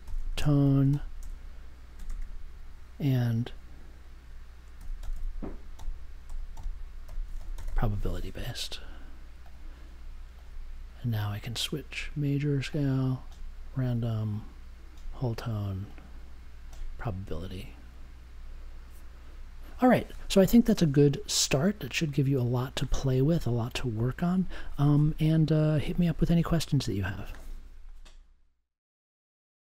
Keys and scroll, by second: 0.0-2.0 typing, 4.7-8.1 typing.